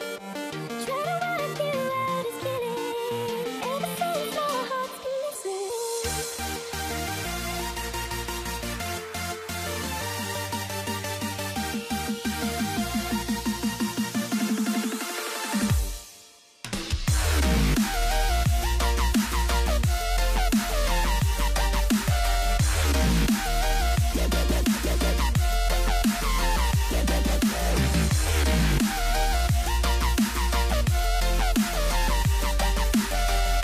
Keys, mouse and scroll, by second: 21.8 n, 23.3 right click, 24.1 click, 24.4 click, 24.7 scroll up 4, 25.1 shift+middle click, 25.4 click, 25.7 click, 26.1 Tab, 26.4 Tab, 26.9 click, 27.1 click, 27.3 click, 27.5 s, 28.4 shift+middle click, 28.7-29.4 scroll up 3, 28.8 shift+middle click, 29.4 g, 30.5 click, 30.7 click, 31.1 h, 31.7 click, 31.8 click, 32.1 click, 32.6 z, 33.4 scroll down 1.